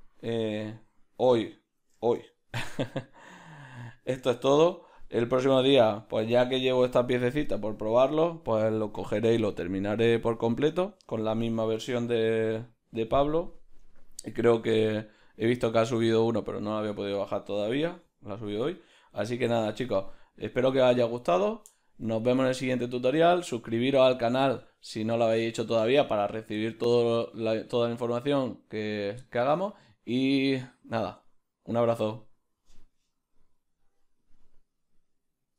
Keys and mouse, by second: 1.0-14.2 ctrl+middle drag.